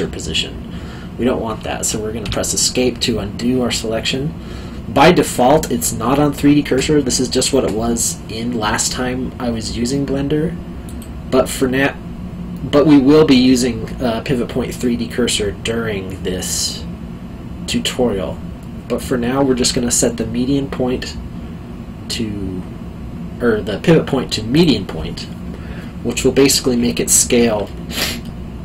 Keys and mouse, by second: 2.2 Escape, 10.9 click, 24.5 click, 26.9 alt+middle click.